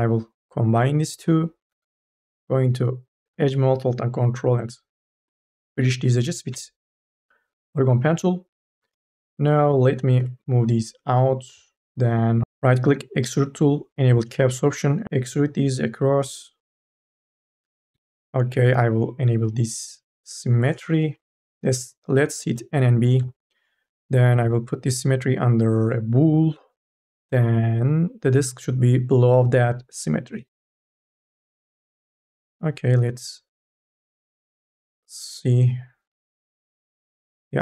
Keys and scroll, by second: 1.5 1, 9.1 3, 9.9 ctrl+a, 10.1 e, 15.0 ctrl+z, 21.0 n, 21.3 b, 22.6 4.